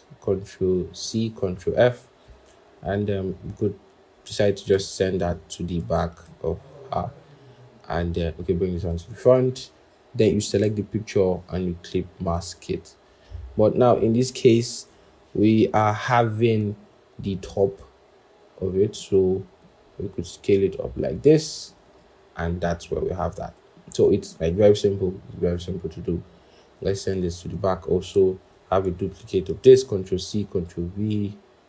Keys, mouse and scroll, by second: 0.9 ctrl+c, 1.9 ctrl+f, 4.9 ctrl+[, 6.1 ctrl+[, 8.7 ctrl+], 10.3 shift+click, 11.5 right click, 17.5 double click, 24.9-26.1 scroll, 27.0 ctrl+[, 28.7 ctrl+c, 29.4 ctrl+f.